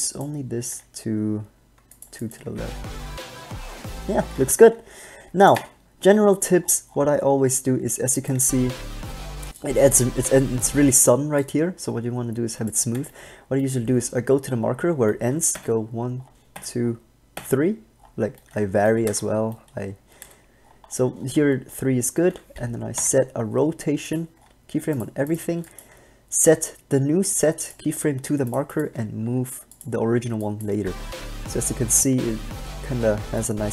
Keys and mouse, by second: 0.0 b, 0.8 g, 2.6 alt+a, 4.6 alt+a, 8.6 alt+a, 11.1 alt+a, 15.7 Left, 16.7 Left, 17.6 Left, 19.3 KP_0, 20.4 KP_0, 23.2 i, 24.7-26.4 drag, 25.8 b, 26.7 g, 29.0 g, 30.9 alt+a.